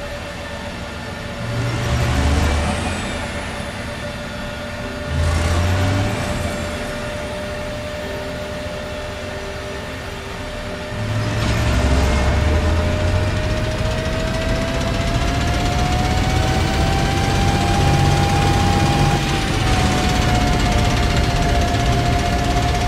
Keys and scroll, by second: 4.0 s, 9.8 e, 11.3 w, 19.7 a, 21.3 w.